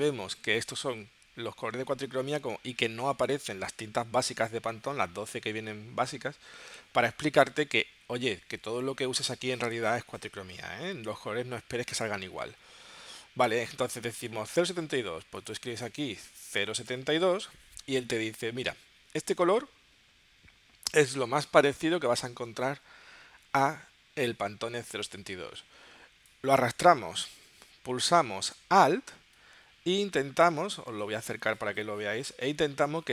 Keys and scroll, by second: 16.4-17.6 typing.